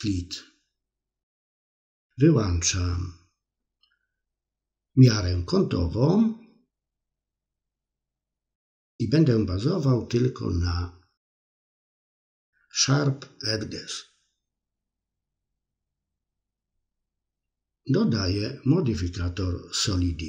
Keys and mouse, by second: 3.0 click, 7.4 click, 11.8 click.